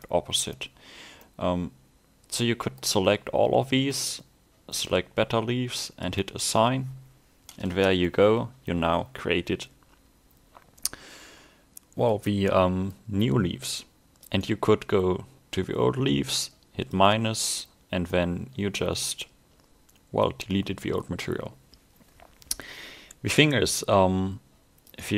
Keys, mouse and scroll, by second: 1.2 middle click, 4.0 click, 7.7 Tab, 8.1 middle click, 12.3 scroll down 1, 12.5 middle click, 14.4 click, 18.2 middle click, 24.9 click.